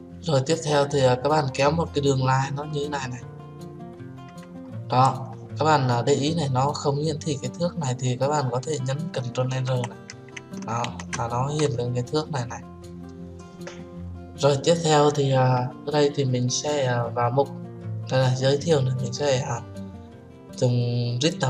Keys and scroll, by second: 9.6 ctrl+r.